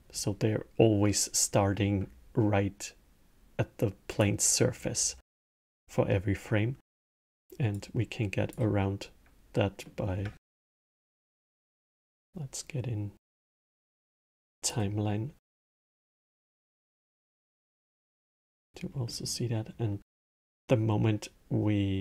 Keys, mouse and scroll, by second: 4.0 click, 7.6 click, 9.6-10.4 middle drag, 10.4 shift+Left, 13.2-15.1 drag, 15.4-16.3 drag, 17.5 click, 18.3-21.9 middle drag.